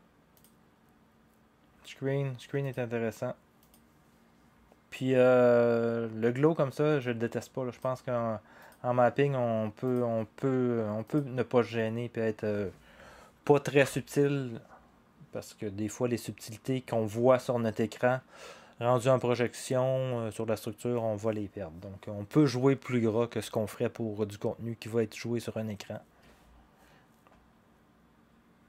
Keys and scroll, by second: 13.8 0.